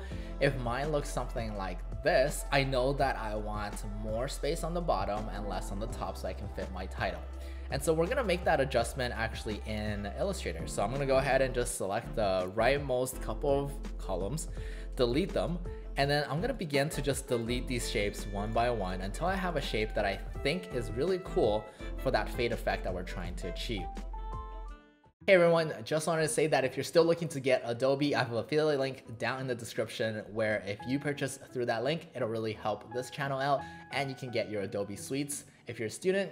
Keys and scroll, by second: 14.4 Delete, 16.2 Delete, 22.6 Delete, 24.9 Delete, 25.1 Delete.